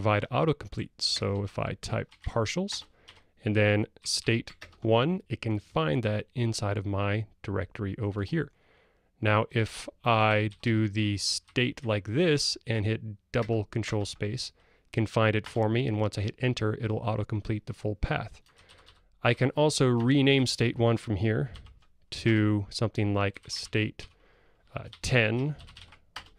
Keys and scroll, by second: 1.2 ctrl+space, 10.5 alt+Up, 13.4 ctrl+space, 15.4 Return, 21.6 ctrl+alt+t.